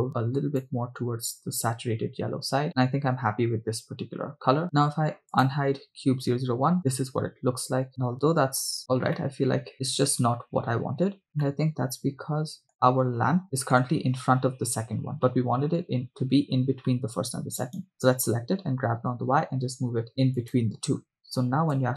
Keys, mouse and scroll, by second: 5.6-7.5 drag, 7.9-9.0 middle drag, 9.3-9.7 middle drag, 9.7 KP_0, 11.6-12.8 middle drag, 13.4-14.0 middle drag, 13.4 click, 15.5 middle click, 17.0 middle click, 17.8 right click, 19.1 g, 19.1 y, 20.6 drag.